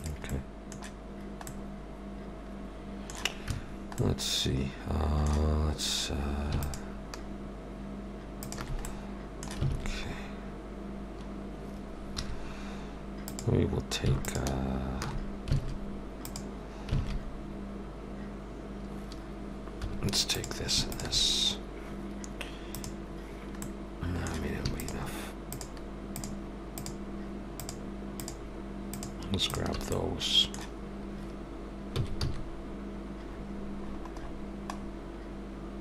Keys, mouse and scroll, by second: 0.3 middle click, 3.5 Tab, 4.0 middle click, 6.6 alt+shift+click, 8.8 middle click, 9.7 alt+a, 12.2 2, 13.3 click, 14.2 alt+shift+click, 15.6 alt+a, 16.2 click, 16.9 alt+a, 19.8 1, 20.3 click, 20.9 shift+click, 22.7 click, 23.6 middle click, 24.7-29.7 shift+click, 29.9 middle click, 31.9 s.